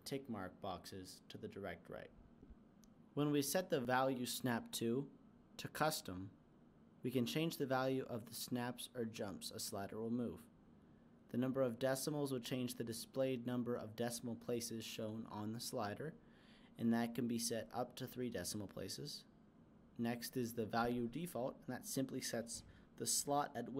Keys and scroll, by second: 12.1-13.8 typing.